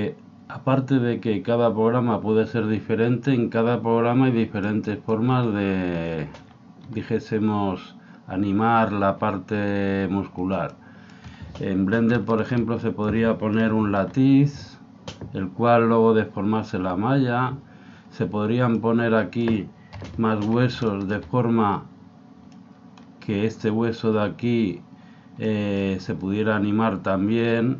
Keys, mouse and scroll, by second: 8.6-10.7 scroll up 1, 10.7-14.4 middle drag, 13.6 KP_1, 15.7-16.8 scroll up 1, 18.8-24.2 middle drag, 20.0 KP_7, 25.4-27.3 middle drag.